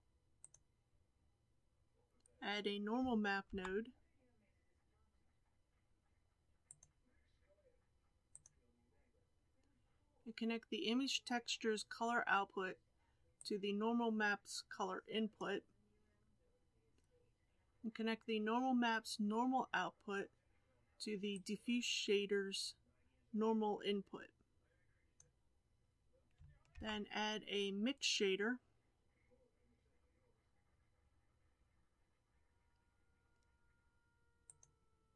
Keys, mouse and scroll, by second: 0.4 click, 5.9-15.4 drag, 26.2-35.1 drag.